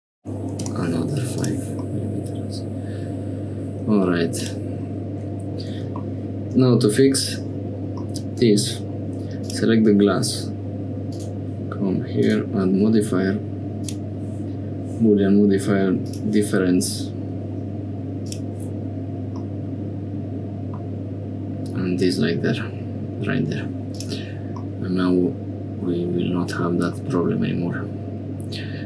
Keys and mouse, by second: 1.4 click, 1.9-3.5 middle drag, 4.4 click, 7.6-8.9 middle drag, 9.4 click, 11.1 click, 12.2-13.9 drag, 16.0 click, 19.4-20.8 middle drag, 24.0 click, 24.6-27.0 middle drag.